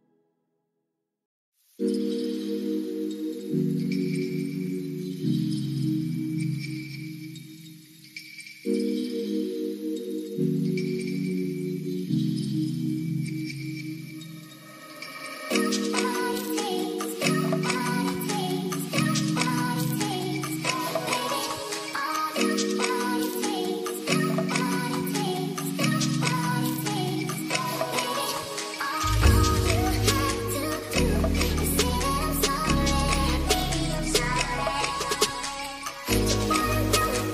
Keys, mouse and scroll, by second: 0.2 middle click, 0.6 middle click, 1.0 shift+a, 6.9-7.2 middle drag, 8.4 middle click, 9.2 drag, 10.0 middle click, 12.9 click, 14.6-16.6 drag, 17.4-20.0 drag, 21.1-22.3 middle drag, 22.8 middle drag, 23.8 middle click, 24.1 shift+a, 33.2 click, 35.2 middle click, 36.1 middle click, 37.0 click, 37.2 click.